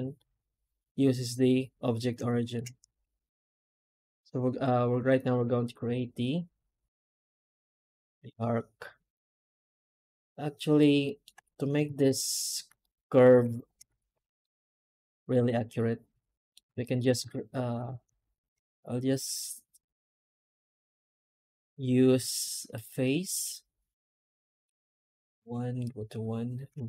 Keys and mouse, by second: 2.1 shift+middle click, 2.4 shift+middle click, 5.8 middle click, 6.2 middle click, 7.1 middle click, 7.7-9.4 middle drag, 9.5 middle click, 9.7 middle click, 10.5 middle click, 10.9 middle click, 11.7 alt+a, 12.2 alt+shift+right click, 12.7 middle click, 13.1 middle click, 13.4 shift+click, 14.3 middle click, 14.8 alt+middle click, 14.9 alt+middle click, 15.2 middle click, 15.4-16.4 middle drag, 16.7 shift+middle click, 17.1 a, 21.2 middle click, 21.5 middle click, 21.8 2, 22.6 click, 23.1 middle click, 23.5-24.5 middle drag.